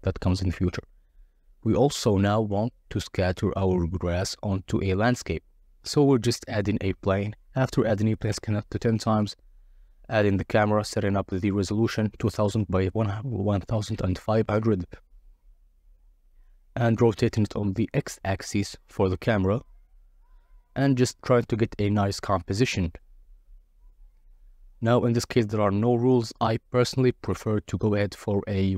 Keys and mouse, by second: 0.6 click, 2.7 shift+a, 5.8-8.4 drag, 6.4 0, 8.5-9.8 drag, 9.5 0, 11.3 click, 12.5-16.8 typing, 13.5 Return, 16.5 Return, 18.0 click, 18.3 click, 19.4 KP_7, 19.9 g, 20.1 x, 21.2 KP_0, 22.9-24.1 drag, 24.8-27.1 drag, 27.1 g, 27.3 z.